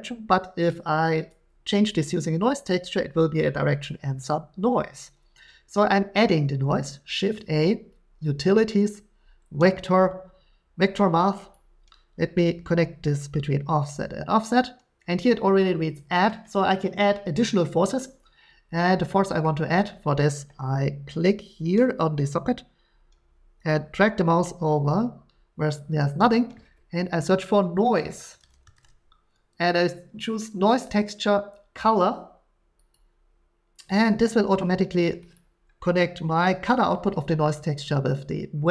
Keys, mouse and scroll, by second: 7.2 a, 11.5 click, 14.6 click, 16.1 click, 19.8 middle click, 26.3 click, 27.9-28.8 typing, 32.9 click, 35.3 click, 38.1-38.7 drag.